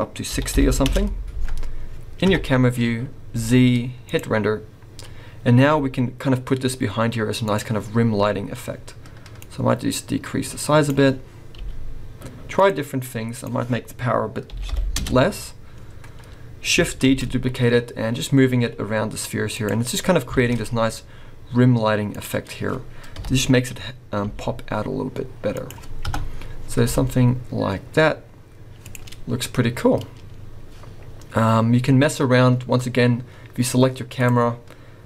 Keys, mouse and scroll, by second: 2.2 KP_0, 3.3 z, 5.0 scroll up 1, 5.9 g, 9.4 click, 11.6 g, 13.5 click, 17.2 shift+d, 20.6 shift+d, 23.4 KP_7, 24.4 g, 26.2 KP_0, 27.1 g, 30.4 scroll down 1, 34.1 click.